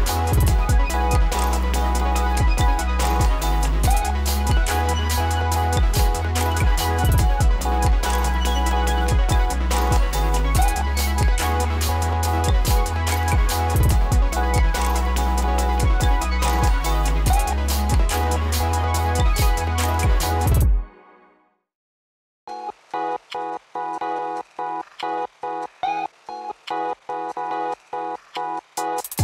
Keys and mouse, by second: 0.0 ctrl+a, 1.4 click, 4.1 Return, 5.2 click, 6.9 ctrl+d, 7.6 click, 8.7 ctrl+a, 10.0 click, 10.9 Return, 12.0-15.0 drag, 21.2 click, 21.4-22.3 typing, 23.7 click.